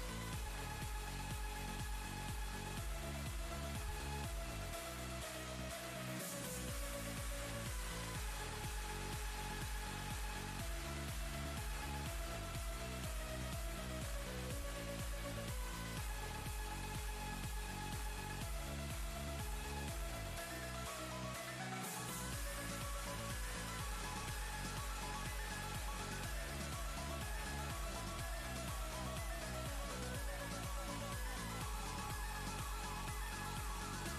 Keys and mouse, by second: 0.3 click, 0.5 right click, 1.6 click, 4.4-8.1 drag, 12.5 ctrl+space, 12.7-13.8 ctrl+click, 13.4 ctrl+space, 13.8 click, 21.5-25.6 typing, 25.8 ctrl+Return, 27.5 click.